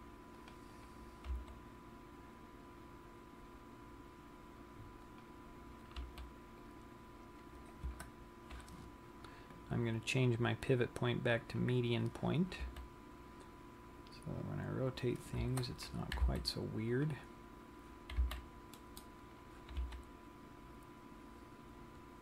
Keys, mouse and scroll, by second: 0.1 c, 1.3 right click, 1.7 g, 5.7 click, 6.4 r, 10.4 click, 13.1 r, 16.8 c, 17.9 right click, 18.9 c, 19.9 right click, 20.3 g.